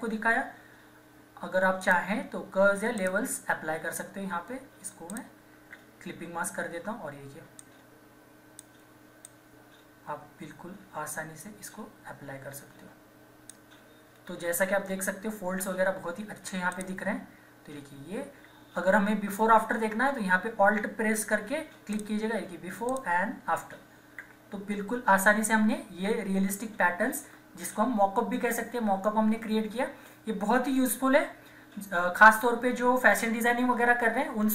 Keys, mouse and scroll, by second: 1.8 click, 7.6 alt+click, 8.1-16.0 drag, 16.7 click, 16.7 typing, 20.7 alt+Num_Lock, 20.7 click, 21.9 alt+click.